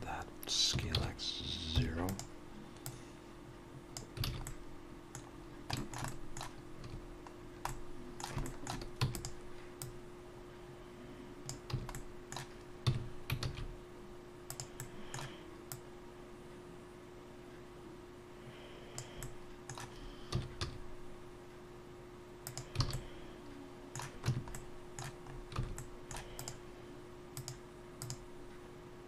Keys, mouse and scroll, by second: 2.9 click, 4.2 alt+a, 4.5 middle click, 5.3-5.7 scroll down 3, 5.7 shift+middle click, 6.1 middle click, 6.9 a, 7.4 scroll down 1, 7.7 middle click, 8.4 shift+middle click, 9.0 e, 9.8 click, 11.7 a, 11.9 middle click, 12.9 s, 14.8 middle click, 15.7 click, 19.2 middle click, 20.3 s, 22.9 alt+a, 22.9 middle click, 24.3 Tab, 24.5 middle click, 25.3-25.6 scroll up 3, 25.6 alt+a, 25.8 middle click, 26.4 click, 27.4 click.